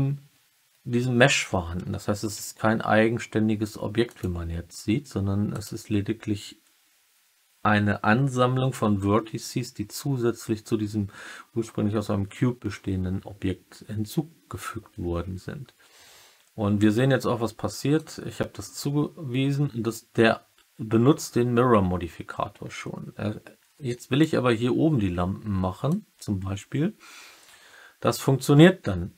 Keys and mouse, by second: 4.0 click, 5.4 click, 17.9-24.1 drag, 25.8-29.1 drag.